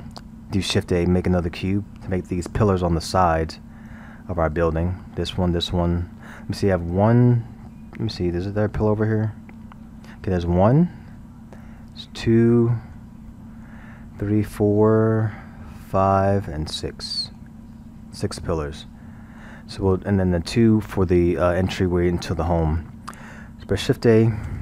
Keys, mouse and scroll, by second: 2.6-7.4 middle drag, 8.1-8.6 scroll, 8.6-9.5 middle drag, 9.5 scroll, 11.1-21.9 middle drag, 24.4 shift+a.